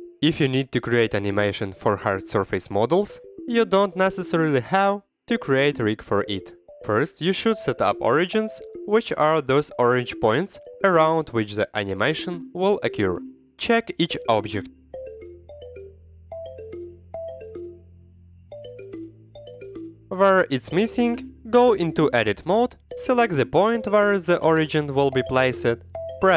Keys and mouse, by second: 0.0 x, 0.0 KP_1, 0.2 click, 0.9 shift+a, 1.9 Tab, 2.2 alt+z, 2.8 click, 3.0 g, 4.2 click, 4.3 g, 4.9 e, 5.8 click, 6.4 g, 6.8 e, 7.5 Tab, 8.0 alt+z, 8.2-8.9 drag, 9.0 x, 9.5 KP_1, 10.0 shift+drag, 11.8-12.4 drag, 12.4 /, 12.5-13.4 middle drag, 13.6 KP_7, 14.0 middle drag, 14.3 /, 14.6 click, 14.6 middle click, 14.9 r, 15.3 Escape, 15.8 KP_1, 16.2 drag, 16.5 drag, 16.5 middle drag, 17.0-17.5 drag, 17.0-17.5 middle drag, 17.7-18.2 drag, 18.4 r, 18.4 z, 19.7 Escape, 20.0 drag, 20.2 shift+click, 21.0 /, 21.2 click, 21.5 Tab, 21.7 shift+click, 22.2 click, 22.3 middle click, 23.2 1, 23.4 click, 24.1 middle click, 24.3 shift+click, 24.7 click, 25.2 shift+click, 25.6 click.